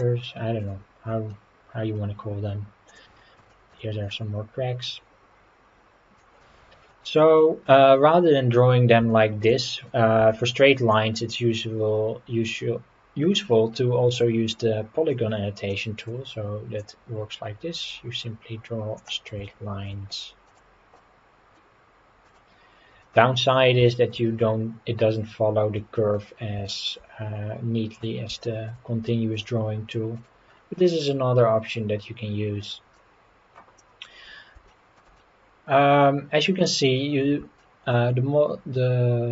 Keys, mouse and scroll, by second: 1.4-1.9 scroll down 4, 2.9 click, 3.5 shift+middle click, 4.9-6.2 drag, 6.6 middle click, 6.9 scroll up 2, 7.4 middle click, 9.1 shift+middle click, 9.6 middle click, 10.9-15.1 drag, 15.7 middle click, 16.8 click, 19.4 shift+middle click, 21.0 middle click, 22.8 scroll down 1, 23.0 middle click, 23.9 shift+middle click, 24.3-25.5 scroll up 3, 25.8 middle click, 26.3 scroll down 2, 26.7 shift+middle click, 28.4 shift+middle click, 30.5-30.8 scroll down 2, 30.8-33.0 middle drag, 33.8 middle click, 34.3 scroll down 2, 34.7 shift+middle click, 35.2-36.5 middle drag, 37.6 shift+middle click.